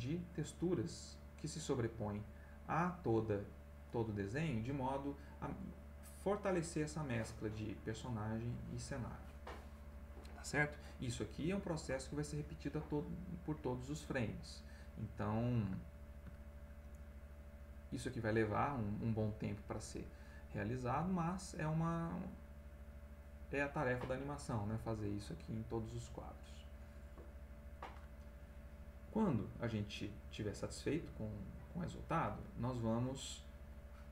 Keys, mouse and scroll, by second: 1.5 click, 2.4 click, 14.0 click, 15.1 middle click, 15.8 ctrl+middle click, 17.7 click, 20.9 click, 22.2 click, 23.0 click, 24.1 middle click, 27.0 middle click, 29.7-31.1 drag, 31.4 click, 32.7 middle click.